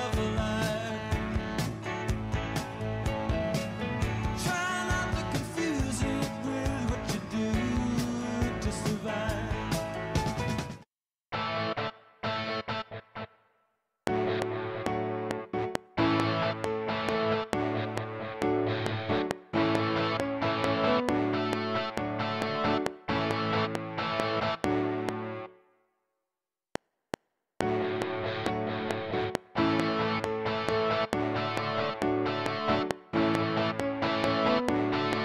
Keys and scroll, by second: 10.5 space, 13.9 space, 25.4 space, 26.6 F7.